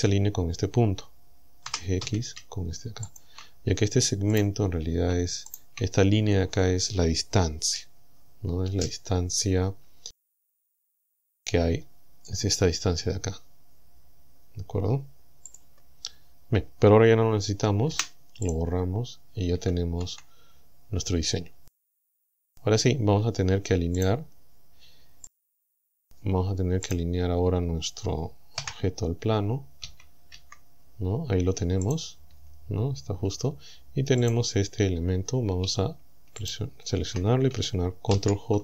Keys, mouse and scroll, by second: 1.7 g, 2.1 x, 3.1 ctrl+click, 3.6-3.9 ctrl+scroll down 3, 4.4 right click, 4.7-5.1 scroll down 2, 5.5 shift+right click, 10.4 click, 11.1 scroll down 2, 11.6-11.9 scroll up 2, 12.5-12.8 scroll up 2, 15.5 click, 16.1-16.5 scroll up 2, 17.9 Delete, 18.5 click, 18.9-19.5 scroll down 1, 19.5 Tab, 20.1 Tab, 20.9-21.3 scroll up 2, 21.3-21.6 scroll down 2, 22.5 scroll down 2, 23.0-23.3 scroll up 2, 24.0 right click, 25.3 right click, 26.9 right click, 27.3-27.9 scroll down 2, 28.6 KP_1, 30.4 KP_1, 31.9 right click, 32.3 Tab, 33.3 Tab, 34.3 right click, 36.5 shift+right click, 38.1 ctrl+j.